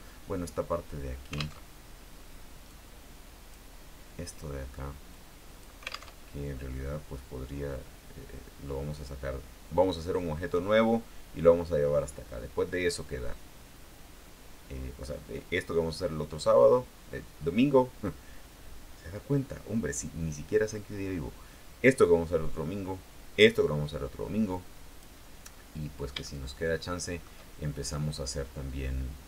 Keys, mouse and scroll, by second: 1.8 alt+Tab, 2.8-3.8 drag, 5.2 click, 6.3 alt+Tab, 10.4-24.6 scroll down 2, 24.6 click, 25.4 middle click, 26.4-27.6 shift+middle drag.